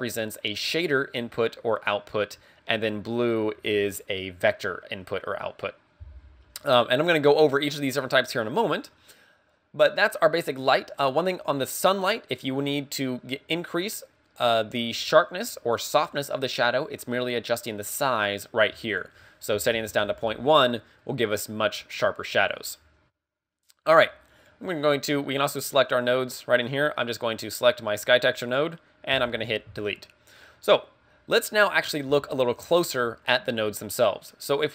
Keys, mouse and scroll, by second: 18.9 ctrl+click, 24.5 click, 25.6 click, 27.4 click, 29.2 x.